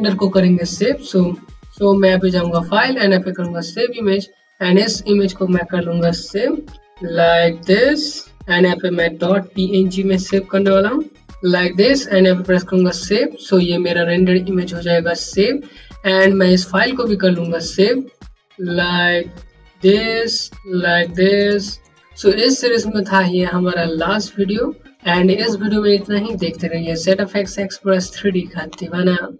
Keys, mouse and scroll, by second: 1.9 click, 5.5-8.7 typing, 5.5 click, 9.8-10.9 typing, 12.2 click, 16.2 click, 18.5 KP_5, 19.2 click.